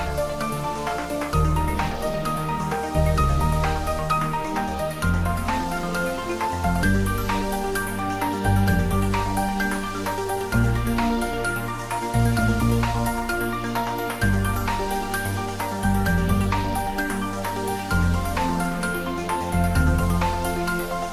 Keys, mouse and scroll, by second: 2.8-14.8 shift+drag, 15.9-19.2 shift+drag, 19.2-21.1 shift+drag.